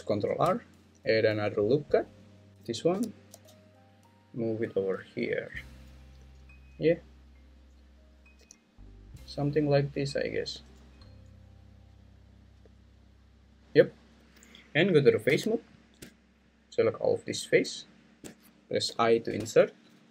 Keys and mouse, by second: 0.3 ctrl+r, 2.5 Escape, 2.9 g, 3.3 x, 5.3 click, 6.2 g, 7.1 click, 8.4 g, 9.7 click, 10.6 g, 11.7 click, 12.6 g, 13.6 click, 15.3 3, 18.9 i.